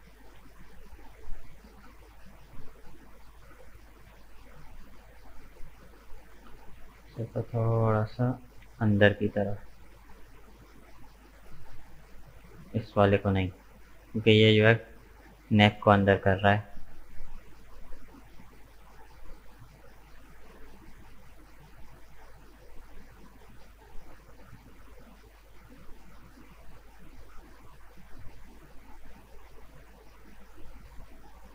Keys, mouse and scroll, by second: 0.1 shift+right click, 0.4-3.5 middle drag, 3.5 middle click, 4.5 shift+right click, 5.4 shift+right click, 5.8-7.9 middle drag, 7.9 g, 13.0 shift+right click, 13.9 g, 18.8-20.1 middle drag, 20.1 KP_1, 21.3 right click, 21.9-25.0 middle drag, 27.5-31.5 middle drag.